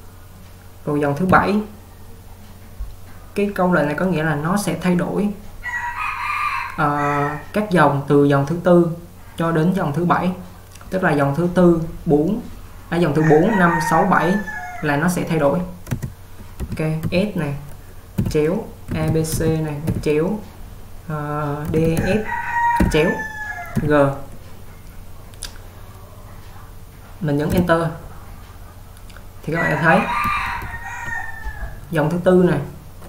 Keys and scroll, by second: 1.3 typing, 16.1 space, 17.1 s, 27.6 Return, 30.6 typing.